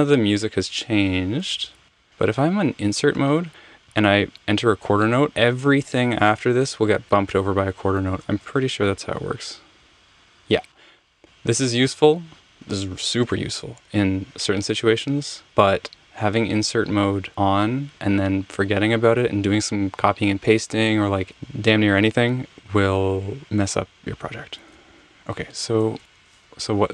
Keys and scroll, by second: 1.6 super+z, 1.9 super+z, 9.8 f, 24.8 super+z, 26.5 Escape.